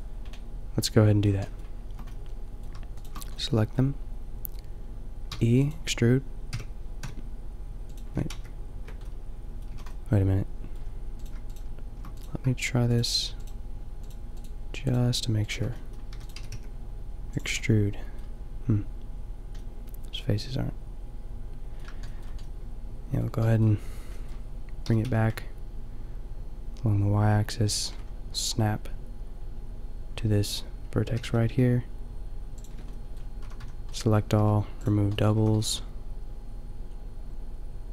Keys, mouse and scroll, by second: 0.3 middle click, 0.8 middle click, 1.2 middle click, 3.1 middle click, 5.3 e, 6.5 g, 8.3 ctrl+z, 9.2 middle click, 9.7 a, 11.2-12.5 middle drag, 16.1 e, 16.4 g, 17.1 click, 17.4 middle click, 18.1-19.4 drag, 21.3 middle click, 22.1-24.8 middle drag, 24.8 g, 28.0-31.1 drag, 31.1 g, 33.0-35.3 middle drag, 33.4 a, 33.6 a, 34.4 w, 35.3 a.